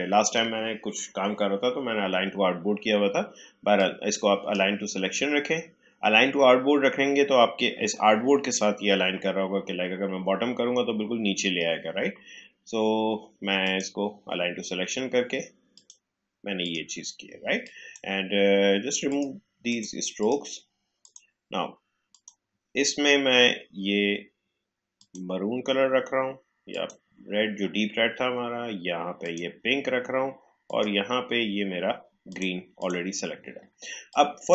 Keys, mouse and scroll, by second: 3.7-7.0 drag, 13.6 click, 24.9 click, 29.1-34.5 drag.